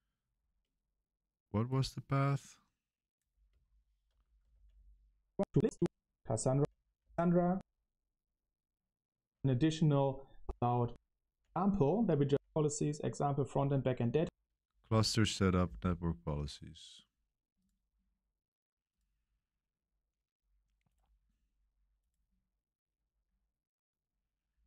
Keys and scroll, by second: 3.4 space, 4.5 Tab, 4.7 Tab, 5.2-11.3 typing, 12.2 Right.